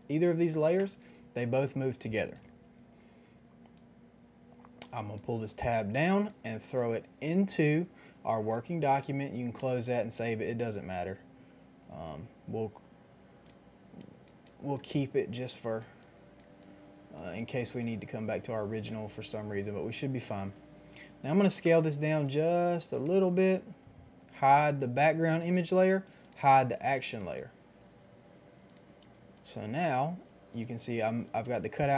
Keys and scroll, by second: 1.3 ctrl+z, 21.4 ctrl+t, 23.1 Return.